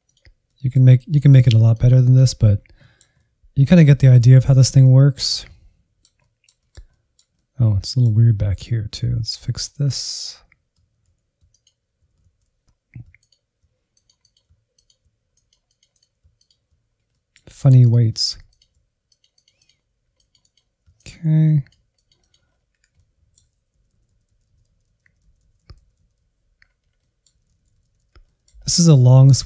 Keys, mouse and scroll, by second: 0.4 middle click, 0.9-2.2 drag, 2.2-2.7 scroll down 3, 2.7-4.5 middle drag, 4.5 scroll down 3, 4.8-7.6 middle drag, 7.6 scroll up 1, 8.0 alt+z, 8.6 Insert, 9.2 alt+z, 9.8 ctrl+click, 10.0 alt+z, 10.7 click, 11.1 f, 12.0 click, 13.1 click, 13.6 click, 14.1 click, 14.6 middle click, 14.8 click, 15.4 click, 16.0 click, 16.2 middle click, 16.7 click, 17.2-18.2 drag, 18.2 middle click, 18.6-20.1 drag, 20.1 middle click, 20.2 click, 20.8 middle click, 20.9 click, 21.1 middle click, 21.3 ctrl+click, 22.0 click, 22.3 scroll down 2, 22.4 shift+middle click, 22.8 scroll down 1, 23.0 shift+middle click, 23.3-23.9 scroll up 2, 23.6 shift+middle click, 23.9-25.2 drag, 25.4 click, 25.7 Insert, 25.8 middle click, 26.1 Right, 26.4-26.9 Left, 27.0-27.3 scroll down 5, 27.3-27.8 Left, 27.9 middle click, 28.1-28.4 scroll up 3, 28.4-29.2 Right.